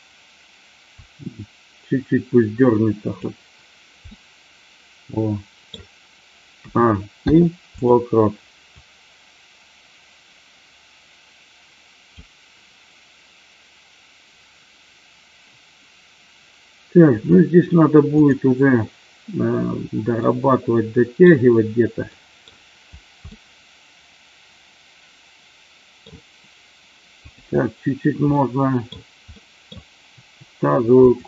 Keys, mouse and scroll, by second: 0.8-3.1 drag, 4.0 scroll up 1, 4.1-5.6 middle drag, 5.6 scroll down 1, 6.5 a, 7.1 i, 8.8-12.2 drag, 18.2 click, 20.3-21.2 middle drag, 22.1 middle drag, 23.3-26.1 middle drag, 27.2 click, 28.3-28.8 middle drag, 29.3-29.7 middle drag, 30.2 r, 30.9 click.